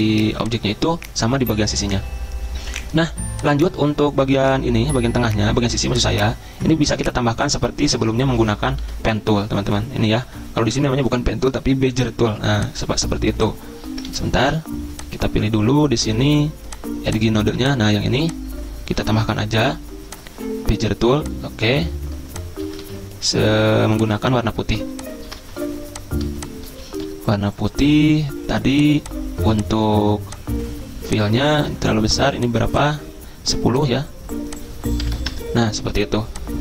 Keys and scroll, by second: 7.9 p, 8.8 ctrl+z, 14.1 ctrl+z, 22.8 ctrl+z, 25.4 ctrl+z, 34.7-35.6 typing.